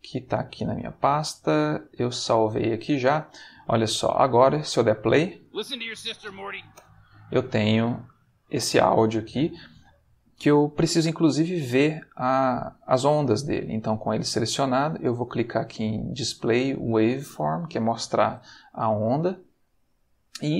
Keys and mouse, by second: 0.8 click, 1.8 click, 2.9 middle click, 5.4 space, 6.7 space, 7.4 middle click, 8.4 ctrl+middle click, 9.1 middle click, 15.9 click, 18.5 ctrl+middle click, 19.1 ctrl+middle click, 20.0-20.5 ctrl+middle drag.